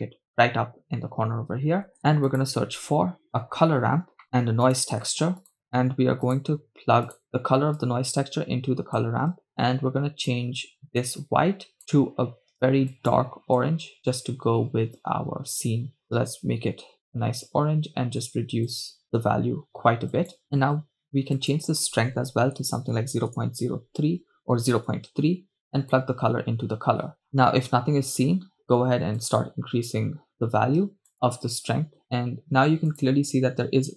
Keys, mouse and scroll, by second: 1.9 shift+a, 5.1 shift+a, 7.9-9.3 drag, 9.7-10.4 drag, 11.2 click, 21.4-23.4 drag, 25.3-26.5 drag, 29.2 click, 31.1 click, 33.1 drag.